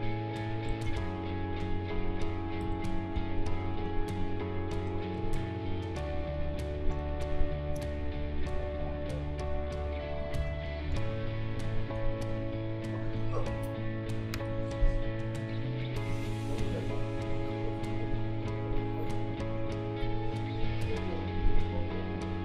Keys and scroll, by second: 0.8 ctrl+z, 2.6 q, 10.4 v, 14.2 ctrl+g, 16.6 a, 20.5 Delete.